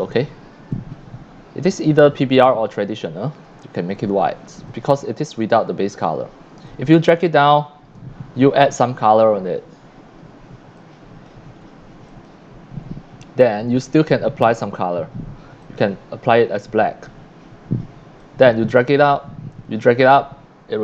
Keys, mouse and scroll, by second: 0.7 click, 2.8 click, 3.5 c, 3.6-4.7 drag, 6.7-8.0 drag, 8.9 click, 10.8 click, 12.1 click, 13.6 click, 15.6 click, 18.2-20.8 drag.